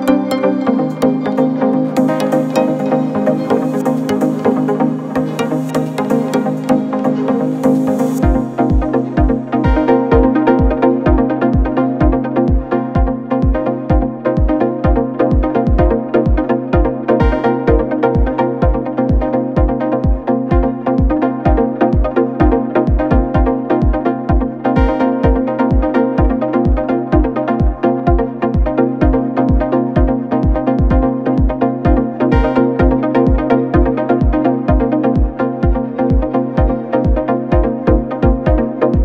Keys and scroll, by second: 25.0 KP_4, 25.2 KP_0, 25.3 KP_0, 25.7 Return, 31.4 KP_3, 31.6 KP_5, 31.9 KP_0, 32.2 Return.